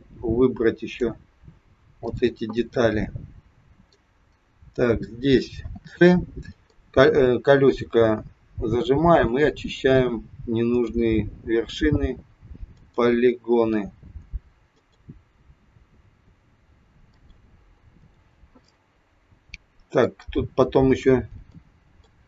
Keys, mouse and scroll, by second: 2.5 middle click, 4.1 scroll down 2, 5.5 c, 18.6 middle click, 20.6 scroll up 3, 21.5 middle click.